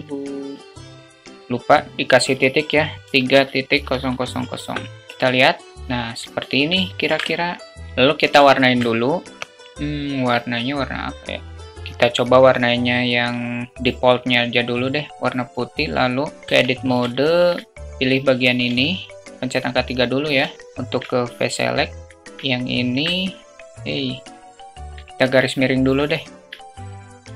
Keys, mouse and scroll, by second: 3.6 0, 6.7 alt+shift+middle click, 8.3 alt+shift+middle drag, 16.4 Tab, 16.9 shift+middle click, 18.5 3, 20.3 alt+shift+click, 22.4-22.7 alt+shift+drag, 24.6 /, 24.8 alt+click, 25.9 alt+click.